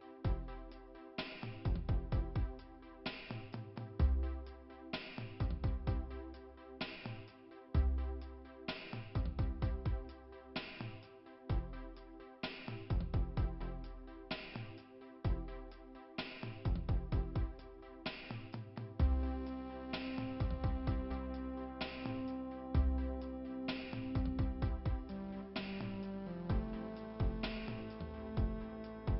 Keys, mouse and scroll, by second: 0.5 scroll down 1, 2.6 scroll down 2, 6.2 middle click, 6.5 ', 7.6 middle click, 12.7-14.0 scroll up 3, 14.6-15.1 scroll up 2, 16.0 right click, 17.5 click, 18.0-18.9 scroll down 1, 18.9-20.1 scroll down 1, 22.7 click, 24.5 scroll down 2, 25.4 scroll up 1, 28.2-29.1 scroll up 1.